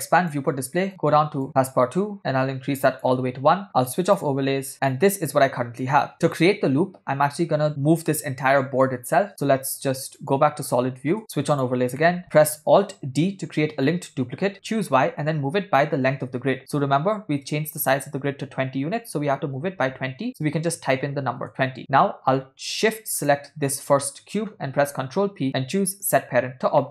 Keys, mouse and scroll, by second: 0.2 click, 0.9 click, 2.2-3.3 drag, 4.2 click, 7.7 drag, 10.4 click, 11.2 KP_0, 11.5 click, 12.0 middle drag, 13.5 alt+d, 23.2 shift+click, 25.4 ctrl+p, 26.8 shift+middle click.